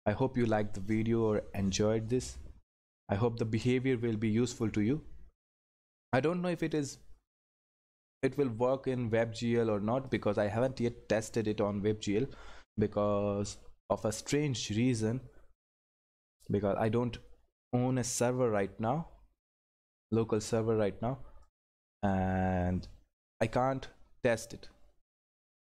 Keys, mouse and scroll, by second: 10.1 click, 14.6 click, 19.7 click.